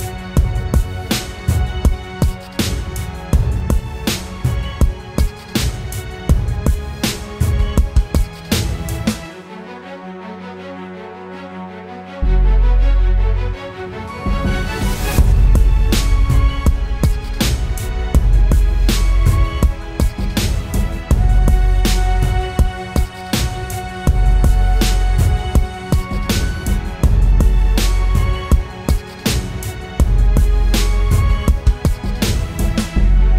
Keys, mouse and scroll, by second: 8.5 double click.